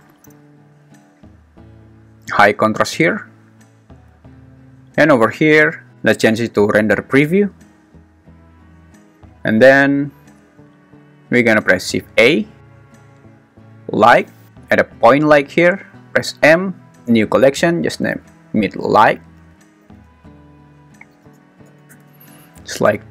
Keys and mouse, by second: 1.9-3.6 drag, 12.3 shift+a, 16.3 m, 19.9 BackSpace, 21.9 Return.